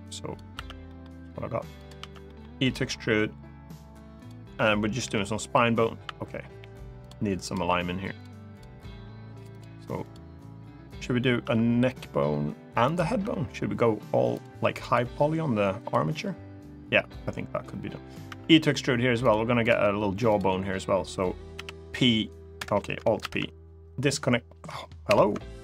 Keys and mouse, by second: 0.3 e, 0.6 middle click, 1.5 click, 1.7 e, 2.0 middle click, 3.9 click, 4.8 KP_3, 6.2 g, 6.7 click, 7.1 click, 7.4 g, 7.9 click, 8.2 click, 8.7 g, 9.2 click, 9.8 click, 11.2 e, 12.6 click, 12.8 e, 14.1 click, 14.5 click, 14.8 g, 15.5 click, 18.9 click, 18.9 e, 20.0 click, 21.3 p, 22.9 alt+p, 24.8 alt+p.